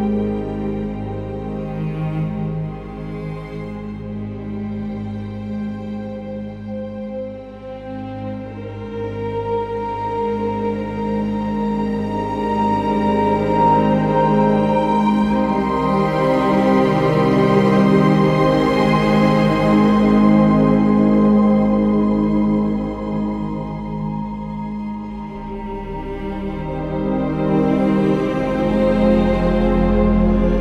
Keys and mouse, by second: 5.4 KP_3, 13.9 click, 14.1 Tab, 15.1 3, 15.2 click, 16.3 KP_3, 17.6 shift+d, 19.0 click, 20.4 1, 22.5 g, 22.7 y, 24.2 click, 25.4 2, 25.8 click, 26.6 g, 26.8 y, 29.6 click.